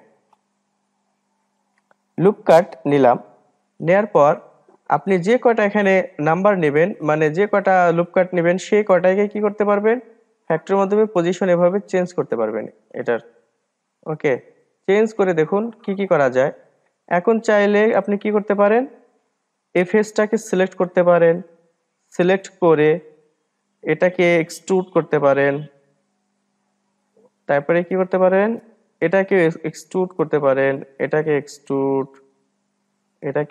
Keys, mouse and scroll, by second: 3.4-4.3 drag, 4.3-7.4 middle drag, 7.4-13.6 drag, 15.7 click, 16.8 click, 18.5-19.8 middle drag, 19.8 click, 20.9 click, 21.6 click, 22.1 click, 22.5-22.9 scroll down 2, 22.9-25.5 middle drag, 25.5 e, 26.7-28.9 middle drag, 28.9 click, 29.5 middle click, 29.9 e, 31.4 click, 31.9 e, 33.3 click.